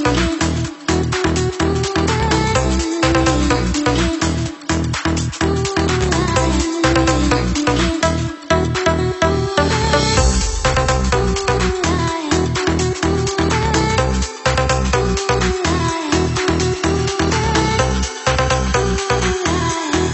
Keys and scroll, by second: 3.7 ctrl+2, 10.3 ctrl+t, 11.9-13.4 typing, 15.9 super+=.